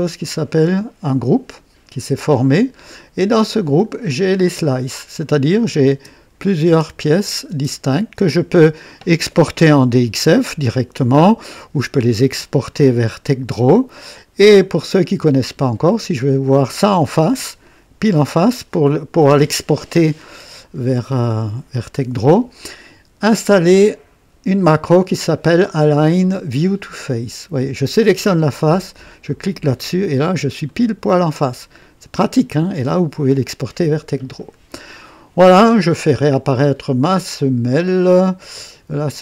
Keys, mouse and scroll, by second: 3.6 click, 4.1 scroll down 2, 5.6 click, 5.9 space, 6.7 space, 7.2 click, 7.5 space, 8.2 space, 9.6 KP_3, 13.9 click, 15.1-15.7 right drag, 16.9 click, 29.1 click, 30.1 scroll down 2, 30.7-32.8 right drag, 34.9-35.6 drag, 36.3 scroll up 2.